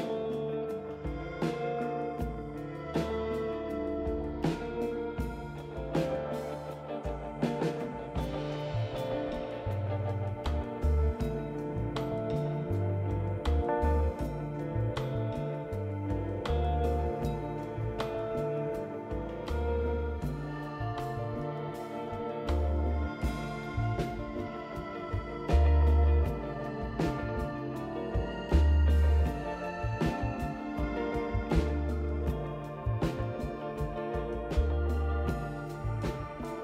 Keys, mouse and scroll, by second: 0.3 click, 1.6-3.5 drag, 3.7 click, 4.6 click, 7.1 click, 10.1 click, 12.9 click, 17.2 ctrl+a, 18.2 1, 18.5 0, 19.1 6, 19.8 Return, 25.1 click, 28.8 click, 30.0 2, 30.9 5, 33.3 click, 34.0 scroll down 2, 34.6 scroll down 2, 36.0 click.